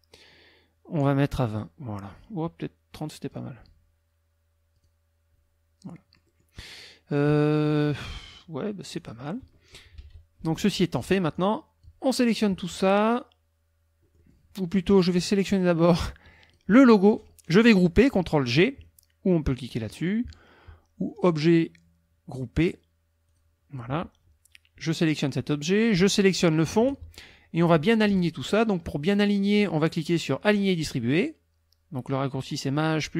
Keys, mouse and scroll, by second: 1.5 click, 3.2 click, 4.8 click, 5.9 middle click, 8.9 click, 9.8 -, 10.7 middle click, 10.8 scroll down 1, 11.3 click, 14.0 middle click, 15.2-16.7 drag, 21.1 click, 23.3 click, 26.1 shift+click.